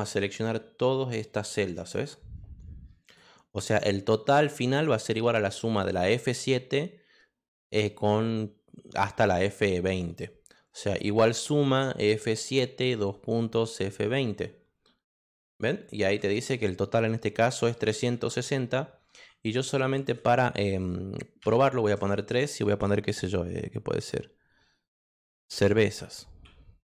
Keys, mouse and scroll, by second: 1.4-3.1 drag, 15.1 Return, 21.4 3, 25.5-26.9 typing.